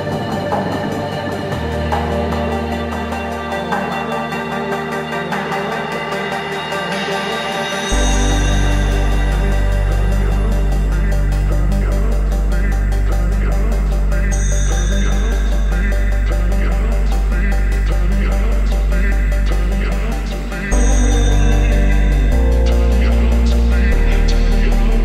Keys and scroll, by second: 0.8 Tab, 2.4 Tab, 3.1-6.1 typing, 6.7 Tab, 8.9 Tab, 9.6-12.9 typing, 13.7 Tab, 15.0 Tab, 15.9-19.3 typing, 20.1 Tab.